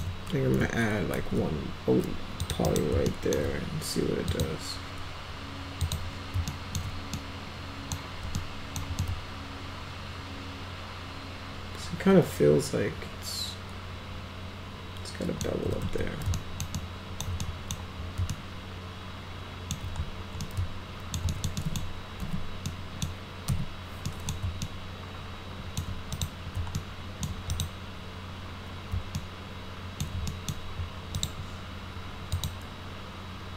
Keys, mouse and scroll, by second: 1.2 alt+y, 2.5 click, 2.7 right click, 3.1 alt+middle click, 4.3 click, 5.8 click, 6.5 alt+middle drag, 7.2-7.9 middle drag, 8.4 alt+middle click, 9.0-15.4 alt+middle drag, 15.8 ctrl+z, 16.3 alt+middle click, 16.8 alt+middle click, 17.4 middle click, 18.3-19.8 alt+middle drag, 20.4 alt+middle click, 21.3 alt+middle click, 21.6 middle click, 22.2 p, 22.7-23.0 middle drag, 23.5 F4, 24.1 middle click, 24.6-25.8 alt+middle drag, 26.1 click, 26.8-27.3 alt+middle drag, 27.5 click, 29.2 alt+middle click, 30.3 middle click, 31.2 click, 32.4 click.